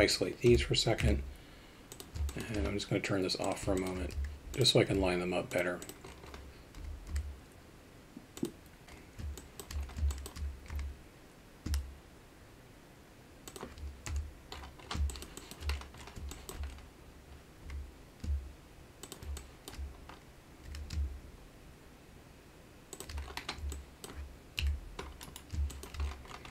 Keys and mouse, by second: 0.5 KP_Divide, 1.0 KP_3, 1.9 click, 2.3 alt+shift+middle drag, 3.4 click, 3.7 alt+shift+middle drag, 4.1 z, 6.8 g, 9.4 alt+shift+middle click, 10.1 alt+shift+middle click, 14.1 KP_7, 16.3 alt+shift+middle click, 19.3-19.7 alt+shift+middle drag, 23.8-24.1 alt+middle drag, 24.6 KP_3, 25.8 alt+shift+middle drag.